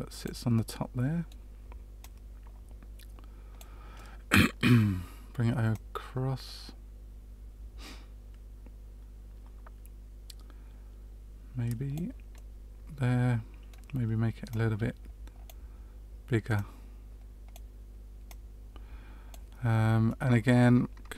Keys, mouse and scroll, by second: 0.5 middle click, 1.9 click, 3.9 middle click, 5.7 click, 12.3 middle click, 14.4 click, 16.5 click, 18.2 click, 20.0 middle click.